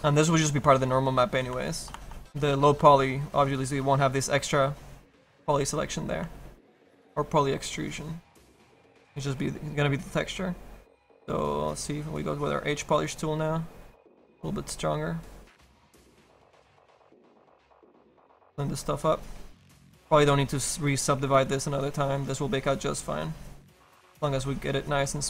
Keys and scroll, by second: 9.1 s, 11.2 s.